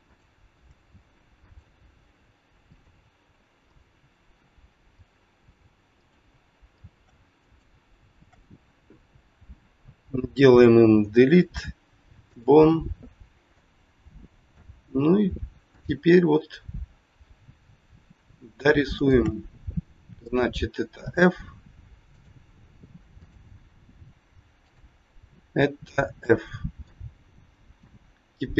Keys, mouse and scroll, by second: 0.1 shift+click, 1.3 shift+click, 2.7 shift+click, 5.0 shift+click, 5.9 shift+click, 6.7 shift+click, 7.4 shift+click, 11.0 Delete, 13.6 middle click, 15.6 click, 18.8 shift+click, 19.6-20.0 scroll up 1, 21.0 f, 22.1 click, 23.2 click, 24.6 shift+click, 24.7 shift+click, 26.1 f, 26.9 middle click.